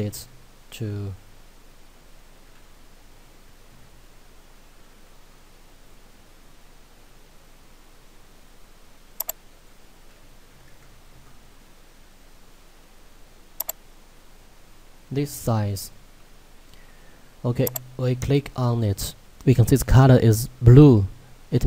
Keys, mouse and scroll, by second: 9.2 click, 13.6 click, 15.0-15.4 scroll up 1, 15.4-16.3 scroll down 1, 16.3-17.7 scroll up 1, 17.7 click.